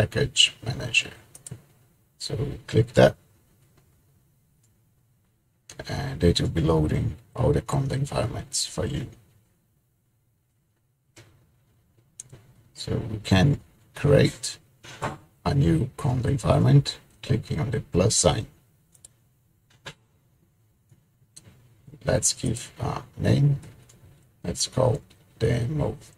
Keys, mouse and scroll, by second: 1.5 click, 19.5 click, 23.2 click, 24.4-25.9 typing.